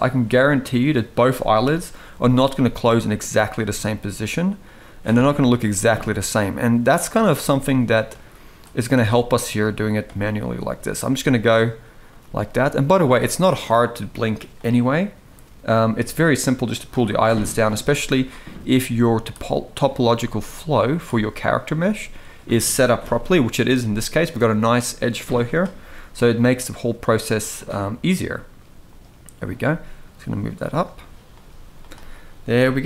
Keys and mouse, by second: 0.5 click, 1.3 KP_1, 2.2 g, 3.2 g, 4.3 click, 5.1 click, 5.3 g, 7.0 g, 8.6 g, 10.9 g, 11.9 g, 13.7-14.0 middle drag, 14.5 middle drag, 15.3 click, 15.6 middle click, 16.5 click, 16.9 g, 18.3 g, 19.8 g, 21.3 click, 21.5 g, 22.7 KP_1, 25.2 click, 25.6 g, 27.2 click, 27.8 g, 29.2 click, 29.3 g, 31.1 g, 32.1 Tab.